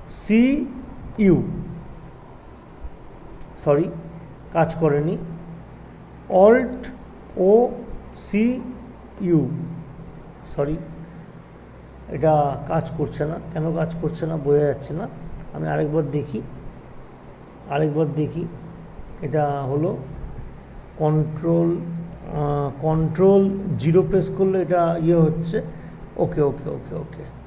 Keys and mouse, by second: 3.1-3.8 typing, 4.8 click, 7.3 typing, 8.8-10.5 typing, 10.5 click, 13.8 click, 13.8 typing, 15.7 ctrl+z, 23.1 ctrl+z, 23.1 typing, 23.9 ctrl+0.